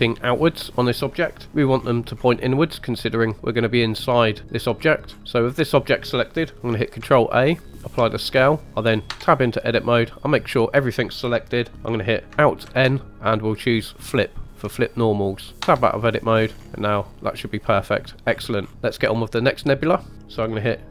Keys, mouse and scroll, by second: 2.1 scroll up 3, 2.6-3.0 middle drag, 4.7-6.7 scroll down 5, 5.2 middle click, 5.2-6.7 scroll up 1, 7.0 ctrl+a, 9.1 Tab, 12.6 alt+n, 15.6 Tab, 16.4-17.1 scroll up 4, 17.0 middle drag, 18.3-18.7 scroll down 3, 19.0-20.1 scroll up 2.